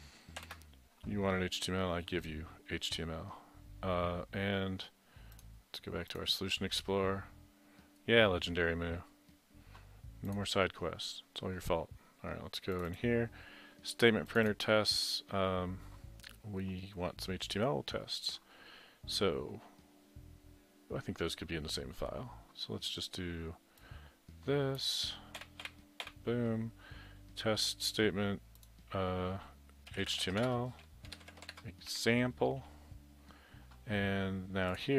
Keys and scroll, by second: 0.2-0.9 typing, 25.4 ctrl+c, 25.7 ctrl+v, 29.9-32.0 typing.